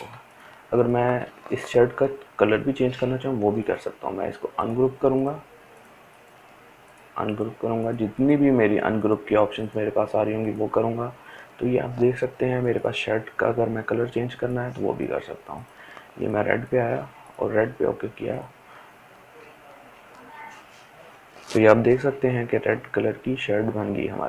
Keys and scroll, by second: 23.8 ctrl+z.